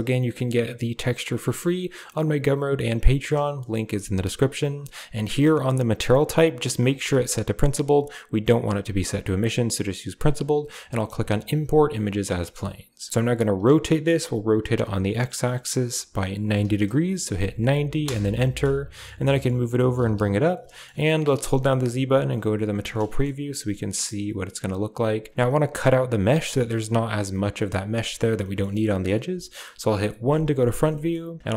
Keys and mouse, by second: 6.6-9.9 drag, 11.3 click, 12.3 middle click, 13.4 r, 18.8 middle click, 19.0 g, 19.6 g, 20.6 shift+middle click, 20.8 middle drag, 21.2 z, 28.3 shift+middle click, 30.1 KP_1, 30.9 shift+middle click.